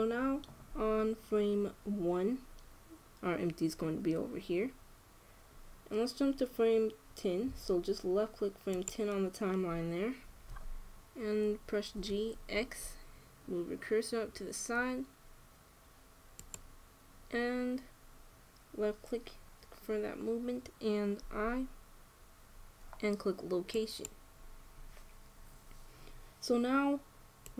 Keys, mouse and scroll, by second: 9.5-11.3 drag, 12.7 g, 24.8 i.